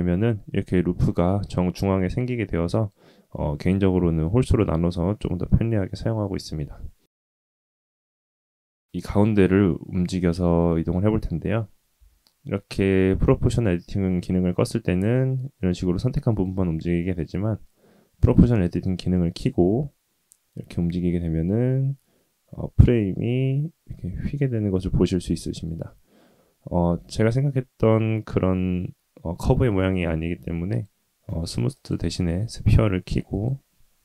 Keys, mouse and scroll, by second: 0.1-1.2 drag, 2.1 click, 7.5 g, 11.3 g, 17.1 click, 19.5 g, 26.9 g, 30.7-33.4 drag.